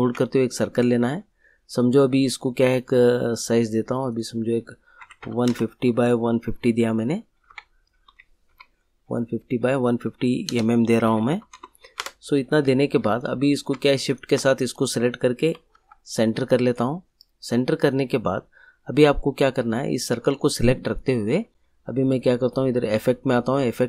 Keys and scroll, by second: 4.7-5.9 typing, 7.5 Tab, 8.4 5, 10.4-12.0 typing, 15.4 e, 15.7 c.